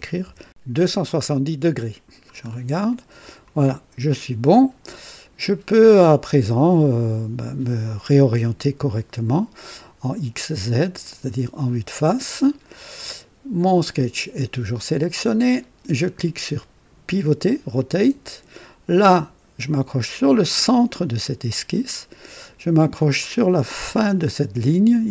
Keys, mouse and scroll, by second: 0.1 KP_7, 0.5 KP_0, 0.9 KP_Enter, 1.8-2.5 scroll down 2, 2.8 right click, 3.6 scroll up 1, 8.8 click, 10.8 click, 12.2-13.0 right drag, 17.7 click, 20.6 click, 21.5-22.1 scroll up 3.